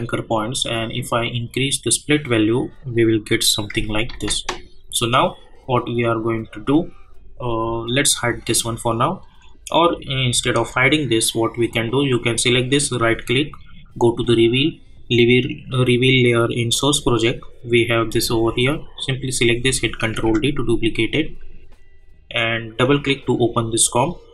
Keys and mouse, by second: 1.2-4.1 drag, 4.1 ctrl+z, 8.4 click, 12.7 right click, 14.0 click, 16.7 click, 16.9 click, 18.9 click, 20.1 ctrl+d, 22.8 click.